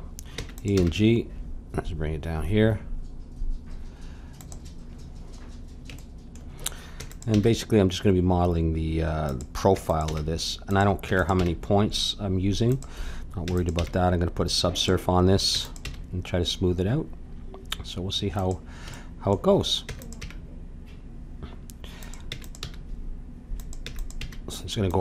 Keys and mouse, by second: 0.4 e, 0.9 g, 5.4-9.0 middle drag, 7.0 e, 7.3 g, 9.7 e, 10.1 g, 11.1 e, 11.4 g, 13.4 e, 13.7 g, 15.5 e, 15.9 g, 18.9-20.8 drag, 19.9 e, 20.2 g, 22.3 e, 22.6 g, 23.8 e, 24.2 g.